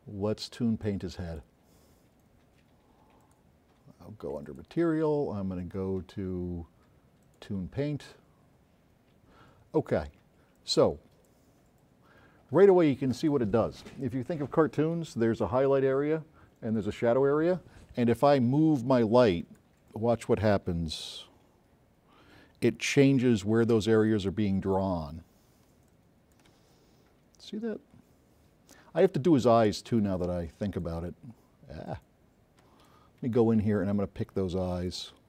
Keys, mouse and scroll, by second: 0.9 click, 3.3 click, 4.5 click, 7.3 click, 10.7 click, 19.3-19.8 drag, 20.9 scroll up 2, 23.3 s, 23.3 right click, 24.1 click, 25.4 scroll up 2, 26.0 click, 26.8 scroll up 2, 28.0 scroll up 2, 29.2-29.7 scroll up 4, 30.3 click, 30.3 s, 31.3 scroll up 2, 32.0-33.0 drag, 34.8 shift+click.